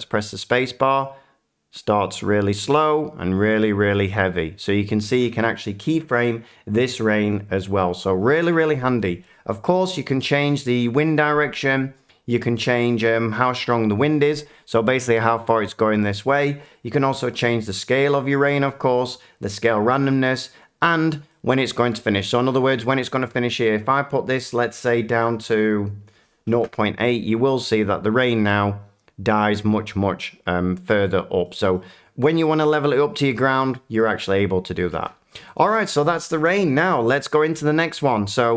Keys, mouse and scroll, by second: 21.8-24.0 middle drag, 26.0-28.1 drag, 31.7-32.1 middle drag, 35.5 click, 36.3 Delete, 37.0 middle click, 37.9 shift+middle click.